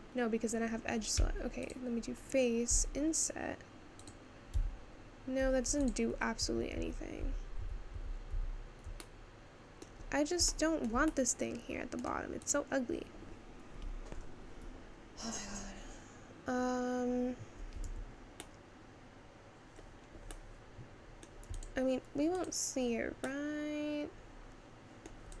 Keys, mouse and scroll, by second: 1.3 3, 1.7 click, 2.7 i, 5.8 click, 6.6 ctrl+z, 6.8 ctrl+z, 9.0-10.0 middle drag, 10.0-10.5 scroll up 3, 10.5-12.7 shift+middle drag, 12.7 click, 18.1 Tab, 18.5-19.9 middle drag, 19.9-20.5 scroll down 3, 20.5-21.6 middle drag, 21.6 click, 22.5 click, 22.8-23.4 scroll down 1, 23.4-25.4 middle drag.